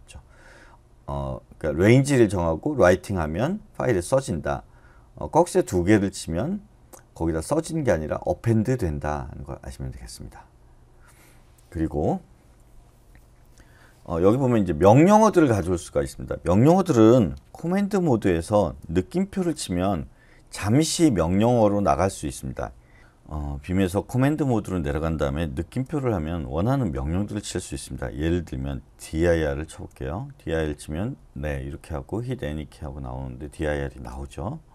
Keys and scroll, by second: 18.1 shift+;, 19.3 shift+1, 23.0 BackSpace, 24.3 shift+;, 25.6 shift+1, 29.0-29.4 typing, 29.7 Return, 34.1 space.